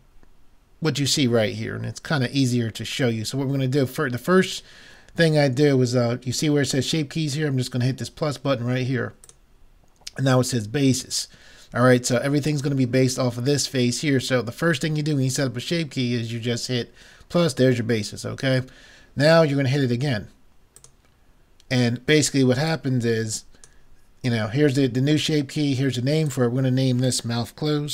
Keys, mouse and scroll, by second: 9.3-11.0 drag, 20.8-22.5 drag, 22.5 middle click, 22.8-24.4 drag, 24.4 middle click, 26.3-27.9 drag.